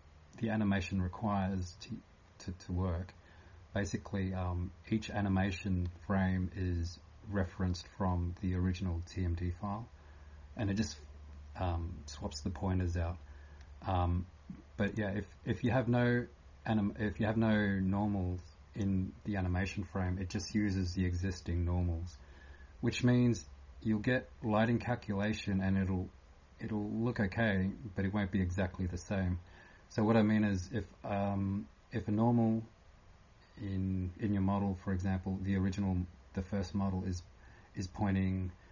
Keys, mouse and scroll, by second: 0.0-38.7 typing, 15.6 click.